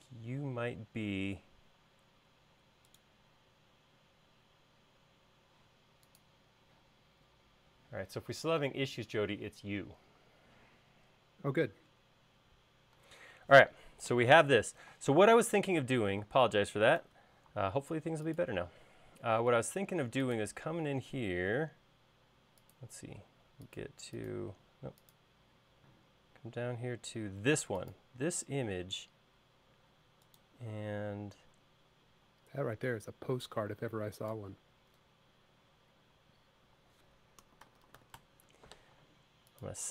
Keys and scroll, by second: 17.4 super+s, 37.8-38.9 typing.